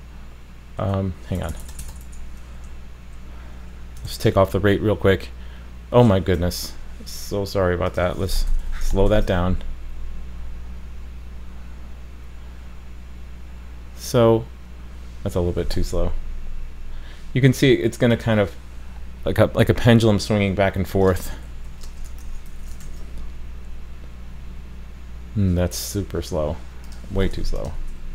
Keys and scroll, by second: 4.1 super+s, 9.1 super+s, 22.8 super+s.